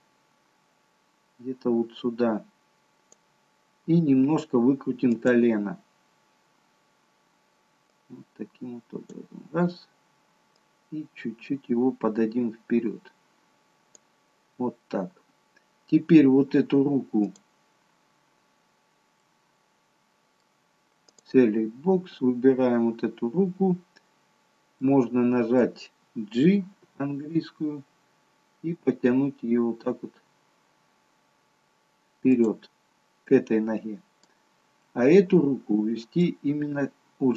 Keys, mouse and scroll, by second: 3.6-5.2 scroll up 1, 5.2 click, 5.2-5.6 scroll up 2, 8.2 click, 10.9 click, 14.8-16.0 scroll down 3, 17.4 click, 19.3 middle click, 21.2 click, 21.7-22.2 scroll up 3, 22.6-24.2 scroll down 1, 24.4-25.2 scroll down 1, 25.2 middle click, 25.2-26.4 scroll down 1, 26.8 g, 33.4 middle click, 35.0 middle click.